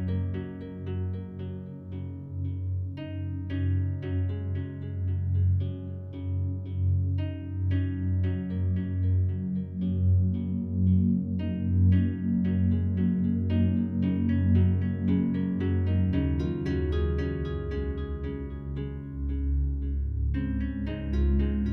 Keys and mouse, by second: 0.0 Home, 1.6-2.6 drag, 3.3-5.1 drag, 5.8-7.3 drag, 7.3 Right, 7.4 Right, 9.0 i, 10.4-14.6 drag, 15.4-17.2 typing, 16.7 click, 17.4-18.6 drag, 18.6 space, 19.3 space, 19.6 click, 20.2 click, 20.5 space.